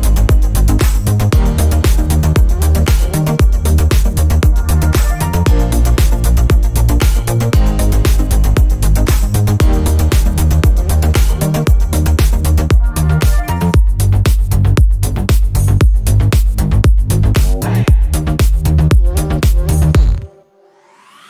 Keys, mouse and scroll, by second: 0.0 click, 0.1 click, 0.4 click, 0.5 drag, 1.6 click, 1.9 drag, 2.0 drag, 2.2 drag, 2.3 click, 2.6 click, 2.8 click, 3.1 drag, 3.3-3.6 drag, 3.9 drag, 4.0 click, 4.3 click, 4.4 click, 4.9 click, 5.2 click, 6.0 drag, 6.0 -, 6.5 drag, 6.7 click, 7.0 click, 7.7-8.0 drag, 8.1 click, 8.3 middle click, 8.5 click, 8.6 click, 8.7 click, 8.9 middle click, 9.1 drag, 9.3 drag, 9.5 click, 9.6 click, 9.8 click, 10.0 click, 10.3 click, 10.5 click, 10.7 click, 11.0 click, 11.0 -, 11.4 click, 11.5 drag, 12.0 drag, 12.4 drag, 12.5 click, 13.0 drag, 13.4 click, 13.9 click, 14.2 click, 14.4 click, 14.5 click, 14.7 click, 15.3 drag, 15.4 click, 15.7 click, 16.0 click, 16.2 click, 16.4 click, 16.5 click, 16.6 click, 16.7 middle drag, 16.8 drag, 17.0 click, 17.2 click, 17.6 middle drag, 17.7 click, 18.1 click, 18.5 click, 19.2 drag, 19.3 click, 19.4 click, 19.9 drag, 20.1 click, 20.4 click, 20.6 click, 20.9 click, 21.0 click.